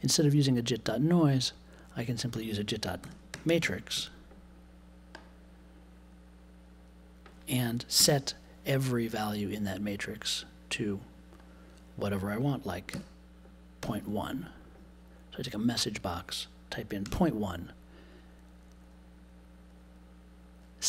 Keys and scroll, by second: 3.0 m, 3.9 x, 7.9 BackSpace, 12.9 m, 13.8 Tab, 13.9 1.